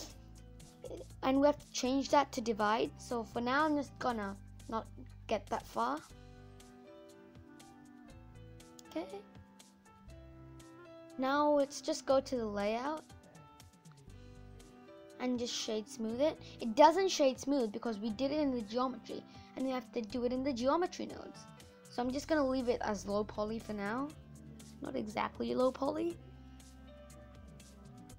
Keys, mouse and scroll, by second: 2.6 scroll down 2, 2.9-4.1 scroll up 11, 4.1-5.4 middle drag, 5.4-6.5 scroll down 12, 6.5 middle click, 7.0 click, 8.9 scroll up 8, 11.7 click, 12.4 scroll down 2, 12.6-13.4 scroll up 7, 13.4-15.1 middle drag, 15.1 right click, 15.3 scroll up 1, 15.4 middle click, 16.0 scroll up 2, 22.1-23.2 drag, 23.2-23.8 scroll down 4, 23.8 middle click, 24.5-24.9 scroll up 4, 24.9 middle click, 25.4-25.8 scroll down 4, 25.8-28.1 middle drag.